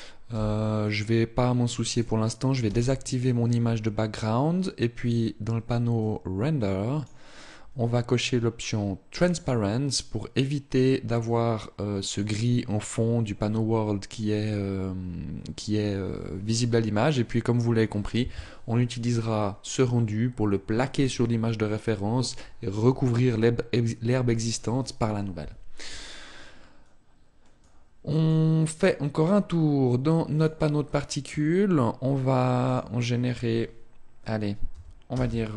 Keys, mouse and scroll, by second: 1.6 click, 2.2 n, 4.7 click, 5.6 click, 8.7 click, 10.8 click, 14.0 click, 27.2 click, 28.3 click, 30.0 click, 32.2 click.